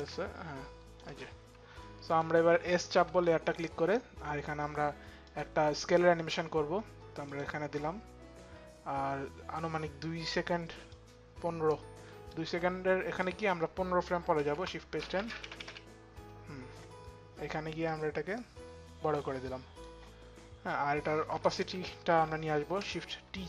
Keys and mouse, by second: 0.7 click, 1.7 click, 2.1 s, 4.9 click, 4.9 s, 6.8 click, 10.5 click, 14.0 shift+Page_Down, 14.6 click, 15.0 shift+Page_Down, 17.5 click, 20.9 click, 21.7 shift+t, 23.1 click.